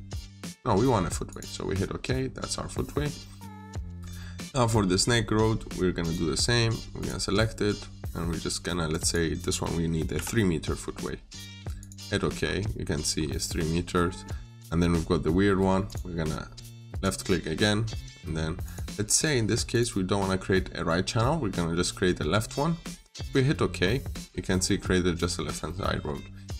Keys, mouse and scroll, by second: 1.8-2.5 scroll down 1, 2.7 middle click, 5.9 click, 10.0 typing, 11.6 click, 12.3-12.6 scroll up 1, 13.0 scroll down 1, 13.3 middle click, 13.9 scroll down 1, 14.1 middle click, 15.7 click, 23.6-24.0 scroll up 1, 24.3 scroll down 1, 24.5 middle click, 25.3 scroll down 1, 25.5 middle click.